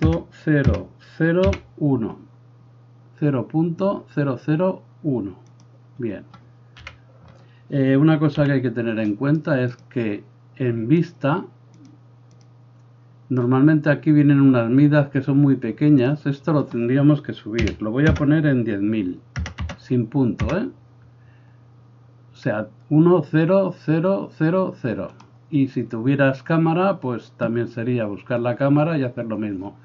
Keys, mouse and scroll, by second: 5.6-9.8 middle drag, 6.9 KP_1, 8.5 n, 9.8 click, 9.9-11.1 middle drag, 11.1 click, 11.5 middle click, 11.9-25.2 drag, 19.6 KP_0, 25.2-29.8 middle drag.